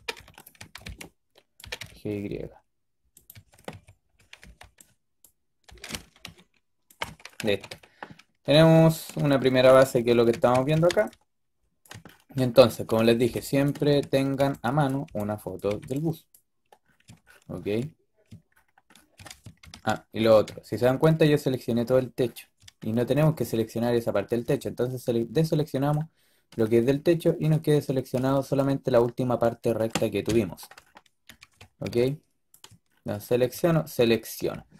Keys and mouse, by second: 0.0-1.5 typing, 3.2 a, 3.6 a, 4.1 a, 4.3 b, 5.5 g, 7.3 a, 9.8-10.8 typing, 13.1 b, 14.3 b, 14.9 b, 15.6 b, 18.9 middle click, 19.5 ctrl+KP_1, 24.3 b, 26.7 middle click, 30.2 KP_3, 31.7 b, 33.2 click.